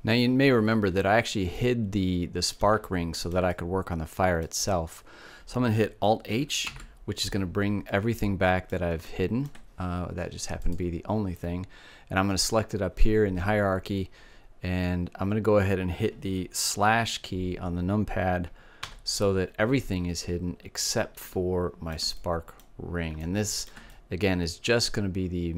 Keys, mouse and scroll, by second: 0.9-4.6 middle drag, 6.0 alt+h, 7.2 middle click, 9.9-11.7 drag, 18.1 KP_Divide, 19.4-20.5 middle drag, 22.8-25.0 middle drag.